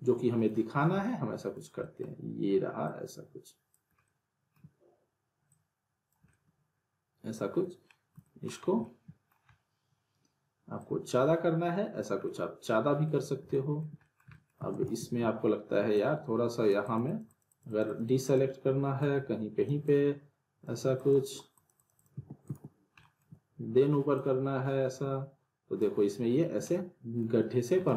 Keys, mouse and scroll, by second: 0.8 scroll up 1, 1.0-1.6 alt+middle click, 1.6 scroll down 1, 1.8 alt+middle click, 2.8-3.8 click, 4.0-4.7 alt+middle drag, 5.5-6.1 click, 6.3-8.2 alt+middle drag, 8.6 scroll up 1, 8.8-9.4 alt+middle click, 9.5-10.8 scroll down 1, 10.8-12.0 drag, 12.2-13.2 middle click, 14.6 alt+w, 14.7 alt+right click, 14.8 alt+w, 15.9-18.6 alt+drag, 22.4 alt+right click, 23.0 alt+middle click, 24.1-26.0 drag, 26.6-27.2 alt+middle click.